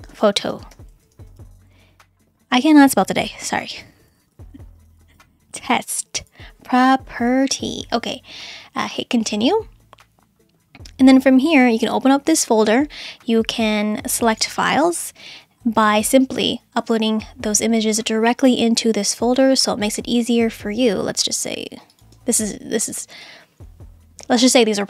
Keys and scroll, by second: 0.0-2.3 typing, 3.4-5.7 typing, 7.1 Right, 7.3 r.